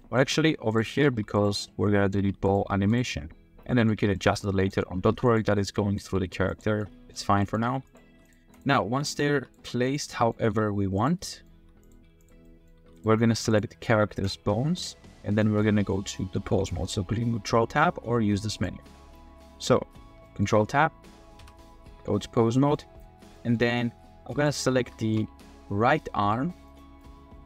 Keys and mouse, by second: 0.0 drag, 0.2 r, 0.7 drag, 1.0 r, 1.1 r, 1.6-2.1 drag, 2.2 g, 2.4 click, 2.6 r, 2.8 r, 2.9 drag, 3.1-3.9 drag, 3.9 g, 4.4 drag, 5.1-10.4 typing, 5.7-6.0 drag, 6.5-7.1 drag, 8.5 click, 10.1 middle drag, 11.3 middle click, 11.6 r, 11.8 click, 11.9 g, 12.4 middle drag, 12.8 g, 12.9-13.3 drag, 13.3 r, 14.9 g, 15.3 click, 15.6 middle click, 18.5 click, 20.2 click, 21.4 ctrl+Tab, 22.5 drag, 23.3 drag, 24.4 click, 25.0 shift+click, 25.3 r, 26.2 r, 27.0-27.3 drag, 27.3-27.4 middle drag.